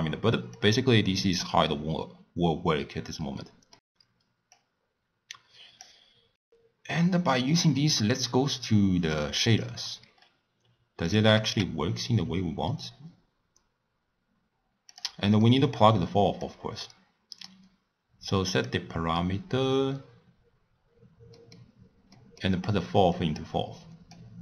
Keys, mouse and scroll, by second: 0.5 drag, 3.4-4.5 middle drag, 4.5 click, 6.3-9.4 middle drag, 9.4 click, 10.1 scroll down 1, 10.3-11.0 scroll up 4, 11.0 click, 11.3 g, 15.4-16.4 middle drag, 16.4 click, 20.8-21.3 scroll up 1, 21.3 middle click, 21.7-22.1 scroll down 3, 22.1-23.1 middle drag, 23.1 click.